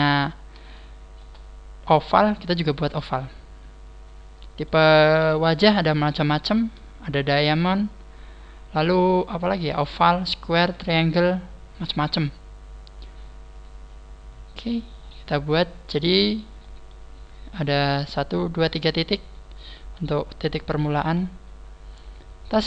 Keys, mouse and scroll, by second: 0.7 shift+middle click, 3.2 middle click, 5.2 KP_1, 12.0 scroll up 5, 12.7 scroll down 2, 13.5 right click, 15.8 middle click, 17.2 middle click, 17.2-17.7 scroll up 3, 17.5 middle click, 19.0 middle click, 19.5 scroll down 3, 20.2 KP_1, 22.4-22.6 scroll up 6.